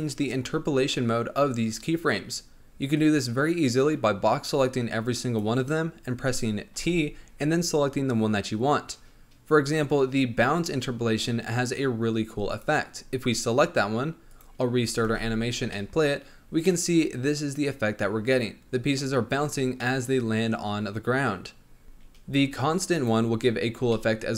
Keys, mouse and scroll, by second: 2.9-6.0 drag, 6.7 t, 14.3-15.0 drag, 15.0 space, 15.7-19.7 middle drag, 19.8-21.8 middle drag, 23.9 middle click.